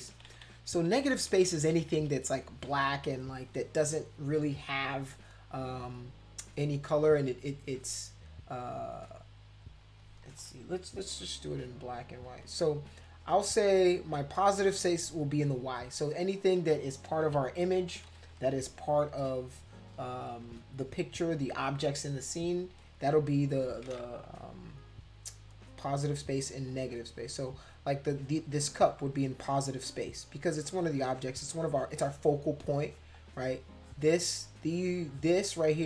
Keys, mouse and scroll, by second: 0.0-2.0 typing, 11.4 x, 12.1 x, 15.5 click, 15.7 click, 17.2 ctrl+z, 25.5 x, 26.7-30.0 drag, 30.3 click, 31.5-33.0 drag, 33.1 click, 33.8 click, 34.1 click, 35.1 click, 35.4 click, 35.7 click.